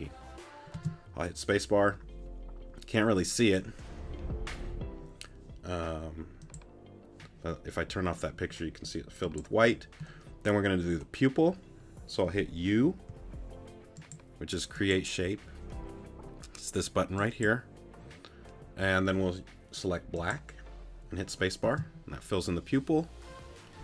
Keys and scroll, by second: 0.7 space, 12.8 u, 21.6 space.